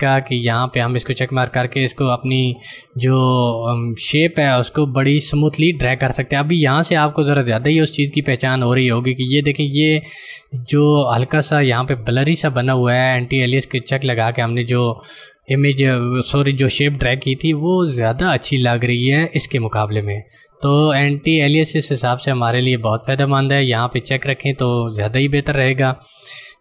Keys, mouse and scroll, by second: 3.7 click, 23.0 click, 24.0 click.